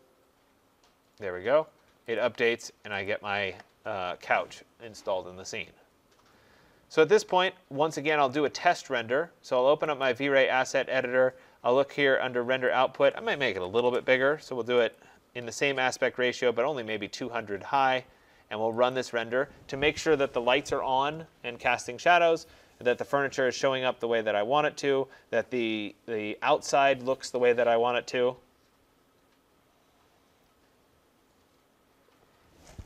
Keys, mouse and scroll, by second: 2.2 click, 3.1 click, 10.0 click, 13.0 click, 13.3-14.2 typing, 14.9 click, 18.9 click.